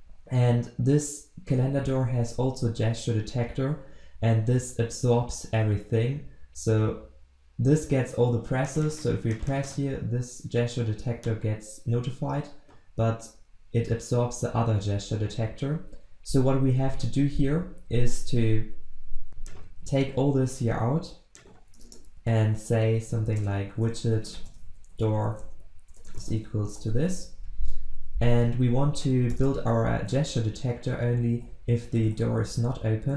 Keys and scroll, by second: 19.8 ctrl+w, 20.9 ctrl+x, 26.7 ctrl+v.